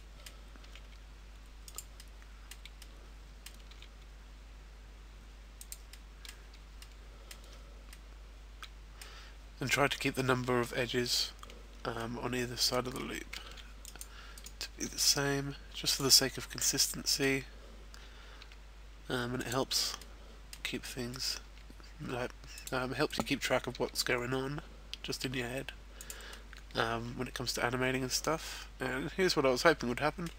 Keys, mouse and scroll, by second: 0.0 middle click, 0.6 e, 1.9 click, 1.9 middle click, 2.6 middle click, 3.9 e, 5.7 click, 5.9 middle click, 6.5 middle click, 7.5-7.9 scroll down 2, 7.9 middle click, 11.9 middle click, 12.8-13.4 scroll up 1, 13.4 ctrl+r, 14.0 click, 14.2 right click, 14.8 g, 15.9 click, 16.2 middle click, 18.6 g, 19.5 click, 20.0 middle click, 21.1 right click, 21.5 g, 22.6 click, 23.1 right click, 23.8 g, 26.0 click, 26.2 middle click.